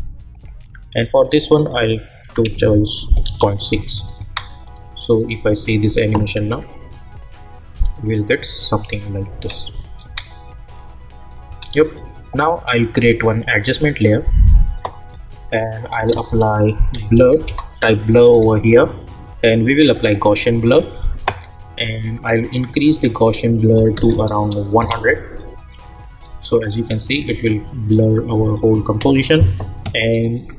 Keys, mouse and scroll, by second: 3.2 Return, 4.0 click, 4.2 space, 9.3 space, 9.6 click, 10.0 space, 12.3 right click, 13.1 click, 16.1 ctrl+a, 16.7-18.3 typing, 19.9 click, 23.1 click, 24.8 Return.